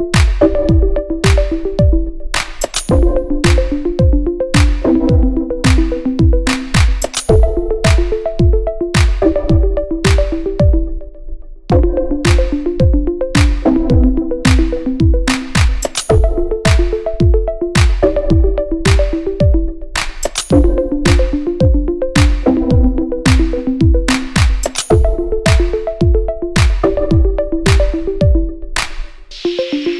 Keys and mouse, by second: 0.6 shift+d, 3.2-4.5 middle drag, 4.5-7.7 drag, 5.9 KP_1, 6.0 KP_3, 6.6 g, 7.7 shift+middle click, 8.6 click, 8.9-10.5 shift+middle drag, 9.0 shift+d, 10.0 x, 10.5 click, 11.0-13.2 shift+middle drag, 11.2 shift+d, 13.2-15.0 drag, 14.2 s, 15.0-16.9 middle drag, 16.9-23.1 drag, 18.4 KP_1, 18.7 KP_3, 19.8 g, 23.1-29.9 middle drag, 28.8-29.9 drag.